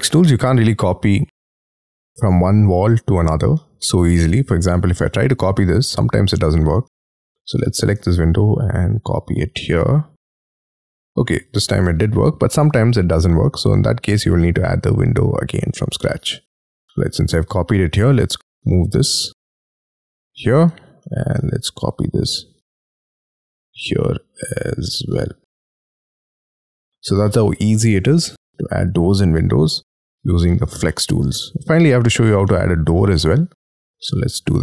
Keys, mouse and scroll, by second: 1.0 scroll down 6, 1.7 middle click, 3.5 middle click, 4.6 scroll up 4, 4.8 typing, 6.2-6.7 scroll up 11, 6.8 space, 7.5 m, 8.4-9.4 scroll down 16, 9.4 scroll up 5, 10.7 middle click, 12.6 scroll down 7, 13.5 scroll down 1, 13.6 scroll up 4, 13.7 space, 16.0 middle click, 16.9 scroll up 2, 17.3 m, 17.5 scroll up 4, 17.6 ,, 20.6 space, 21.0 m, 21.5 ctrl+click, 23.7-24.1 scroll up 7, 25.2 scroll down 6, 25.7 y, 26.0 middle click, 26.6-27.2 scroll down 10, 27.2 middle click, 30.0 scroll down 5, 30.4 shift+middle click, 30.8 middle click, 31.8 middle click, 32.4 middle click, 33.0 shift+middle click, 33.7 middle click, 34.1 scroll down 1, 34.3-34.6 scroll up 6.